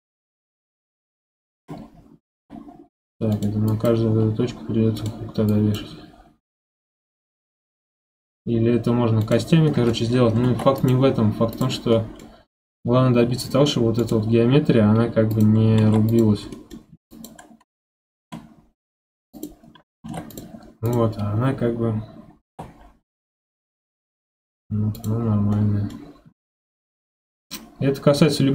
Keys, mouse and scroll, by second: 2.3 g, 3.7 click, 4.1 g, 5.5 click, 6.4 g, 9.7 middle click, 10.1-10.4 scroll up 3, 10.4 ctrl+Tab, 11.1-11.5 scroll down 2, 11.5 drag, 11.9-12.5 scroll up 2, 11.9-12.3 middle drag, 12.7-13.2 scroll down 2, 13.2 g, 15.3 click, 15.8 ctrl+Tab, 16.5 middle click, 16.9 1, 17.1 click, 18.1 ctrl+h, 20.0 ctrl+Tab, 20.3 drag, 20.8 click, 21.1 scroll down 1, 22.5 g, 25.2-25.5 scroll up 7, 25.5-26.2 middle drag, 26.2 g.